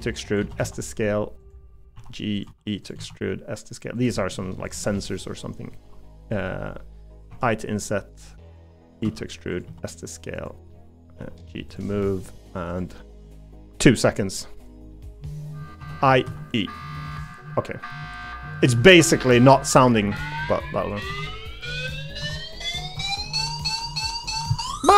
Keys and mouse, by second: 0.4 s, 1.9 g, 2.4 e, 3.0 s, 4.2 middle click, 9.0 e, 9.6 s, 10.7 middle click, 11.2 g, 12.0 middle click, 13.8 middle click, 14.9 middle click, 16.2 e, 17.3 middle click, 20.0 g, 21.1 Tab, 21.6 middle click, 23.4 middle click, 23.9 middle click.